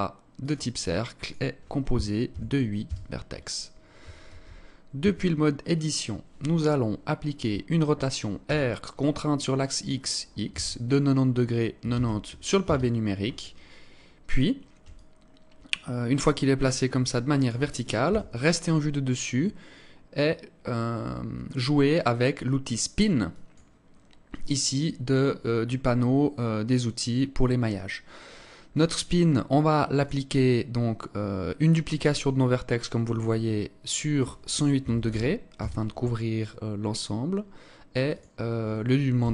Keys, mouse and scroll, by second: 1.1 click, 4.1 ctrl+space, 4.5-5.2 scroll up 2, 4.9 Tab, 8.3 r, 14.7 alt+click, 17.9 KP_7, 23.0 click, 28.0 scroll up 2, 29.6 click, 37.6 click.